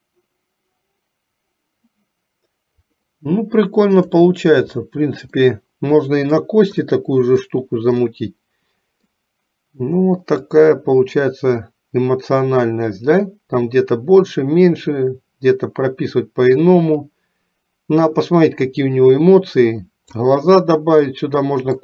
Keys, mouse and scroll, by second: 5.6-6.7 middle drag, 7.0 middle click, 8.2 middle click, 10.6-20.3 drag, 21.1 middle click.